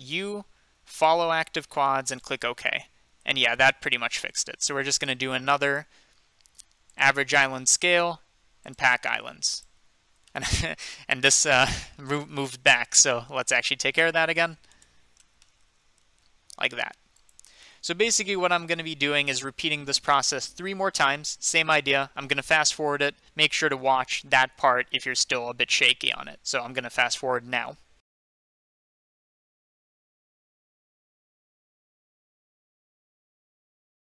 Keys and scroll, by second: 0.0 u, 4.7 a, 13.7-15.7 typing, 16.7 typing, 28.1-34.1 typing, 30.8 Tab, 30.9 Tab, 33.8 Tab, 33.9 ctrl+z.